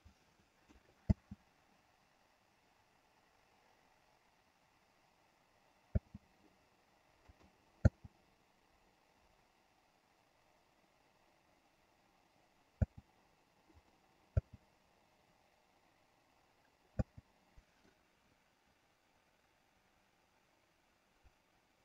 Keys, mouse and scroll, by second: 0.1 click, 1.2 space, 6.1 space, 7.4 click, 7.9 space, 12.9 space, 13.8 click, 14.4 space, 17.2 space, 17.9-21.8 drag.